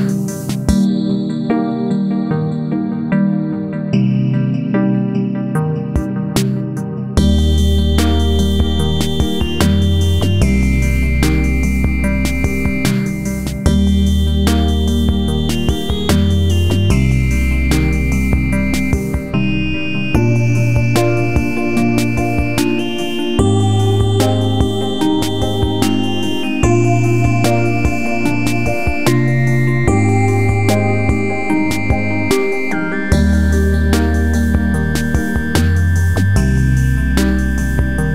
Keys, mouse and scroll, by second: 0.6 click, 1.2 Up, 2.0 Right, 3.1-5.4 drag, 5.9 click, 7.0 F4, 7.4 click, 8.5-10.9 drag, 11.6 click, 12.5 right click, 12.9-14.1 drag, 14.1 click, 14.9-17.2 shift+drag, 17.2-18.8 drag, 19.2 z, 19.5-20.8 drag, 21.9 click, 22.3 ctrl+z, 22.5-23.8 drag, 23.8-25.5 drag, 26.4 right click, 26.8 click, 30.1 F4, 31.4 click, 32.2 ctrl+c, 32.6 ctrl+z, 32.9 click, 34.6-35.9 drag, 35.9-36.3 scroll up 1, 36.9 click.